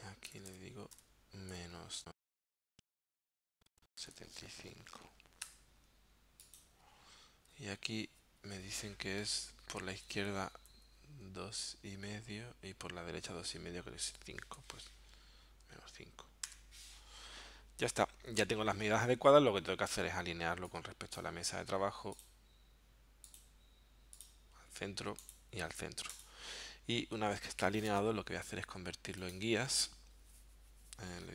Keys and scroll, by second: 0.3 BackSpace, 1.5 space, 2.5 3, 3.4 ,, 4.0 7, 4.2 5, 5.5 Tab, 7.8 Right, 8.5 Right, 9.8 BackSpace, 14.1 space, 14.6 5, 16.5 Tab.